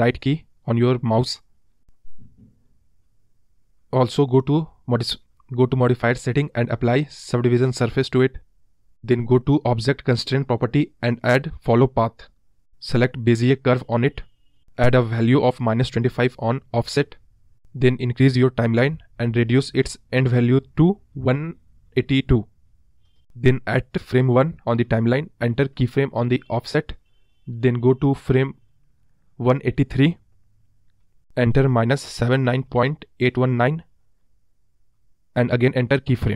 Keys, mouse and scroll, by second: 0.4-1.2 scroll up 3, 1.2 right drag, 1.5 scroll up 2, 5.9-6.8 scroll up 1, 6.8-7.8 scroll down 6, 7.8-8.1 scroll down 6, 8.1 scroll up 1, 8.2-9.2 middle drag, 9.2-10.2 scroll up 1, 10.2-10.8 scroll up 1, 12.4-15.3 drag, 15.3-16.3 scroll down 6, 16.3-17.6 scroll down 1, 17.6-22.3 drag, 22.3 scroll up 2, 22.4-23.2 scroll down 1, 23.2-23.5 middle drag, 23.5-25.9 scroll up 3, 26.7-27.8 drag, 27.8 Right, 34.4-36.3 drag.